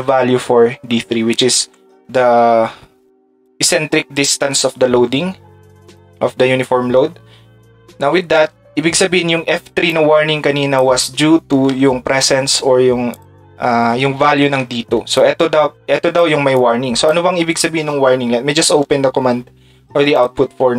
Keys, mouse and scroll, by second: 0.6 d, 15.1 ctrl+click, 20.1 click.